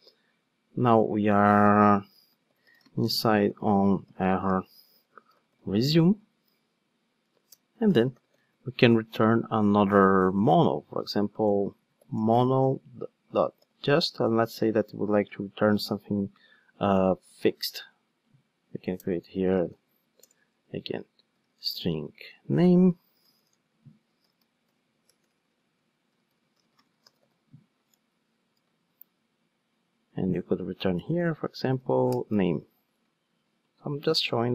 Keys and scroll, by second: 14.2 Return, 32.1 Return.